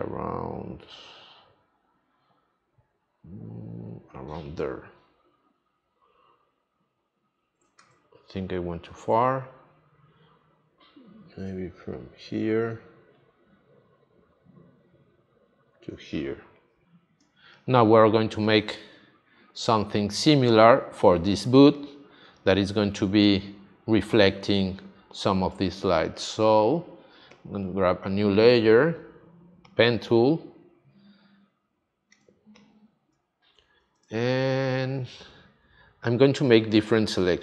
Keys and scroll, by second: 7.7 super+z, 17.2 space, 21.4 space, 25.5 space, 32.1 space.